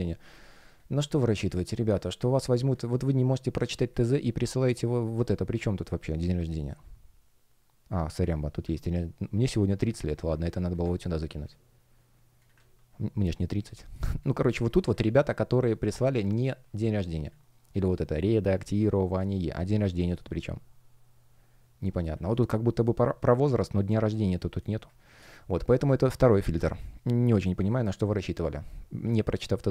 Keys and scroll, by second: 9.7 super+ч, 10.3 space, 11.3 space, 12.5 super+m, 14.0 space, 24.5 space, 25.6 space, 27.1 space.